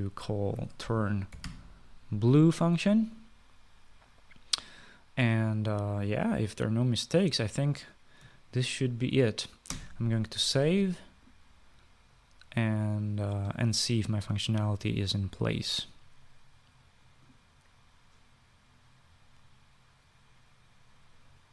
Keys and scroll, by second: 1.2-2.8 typing, 10.5 ctrl+s.